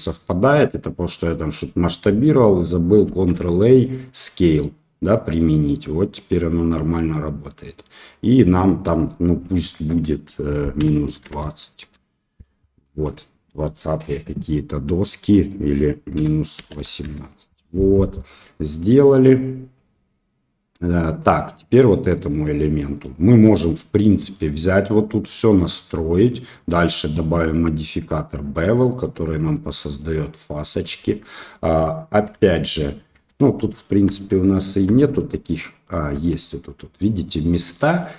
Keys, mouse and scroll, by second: 3.0 ctrl+a, 6.2-8.4 drag, 9.0-12.5 drag, 13.0 middle click, 15.2-17.5 drag, 17.9 middle drag, 18.8 middle click, 21.5 click, 22.9 click, 23.5-24.3 middle drag, 26.5-28.4 drag, 28.8 middle drag, 29.9-30.6 middle drag, 31.0-31.5 ctrl+shift+middle drag, 32.4 shift+middle drag, 32.9 middle click, 33.2 Tab, 34.0 Tab, 34.4 middle click, 34.8 Tab, 35.5 middle click, 36.1 Tab, 36.4 middle click, 37.7 middle drag.